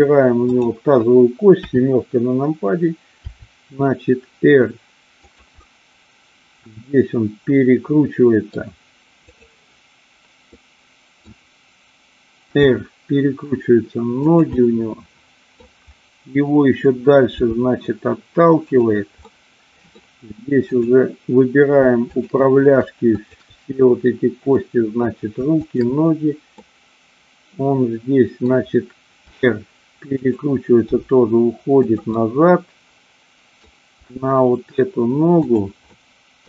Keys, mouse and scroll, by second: 0.4 click, 1.7 KP_7, 3.2 r, 5.6-8.6 middle drag, 9.2-10.3 drag, 10.4 middle click, 12.6 r, 14.2 click, 14.6-15.7 middle drag, 17.3 g, 18.8 click, 19.2-20.0 middle drag, 20.7-21.6 drag, 21.9-23.0 shift+drag, 23.2-23.6 shift+drag, 24.6-25.0 middle drag, 25.6-26.6 shift+drag, 26.7-28.4 middle drag, 29.2 r, 30.2 click, 30.9 g, 31.8 click, 32.0-33.6 middle drag, 34.0 g, 35.4 click, 35.8-36.4 scroll up 1.